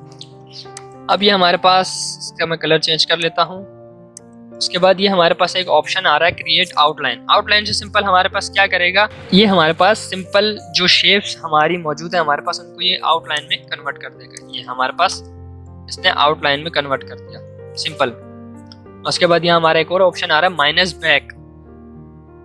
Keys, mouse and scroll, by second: 13.3-17.1 drag, 17.1 ctrl+z.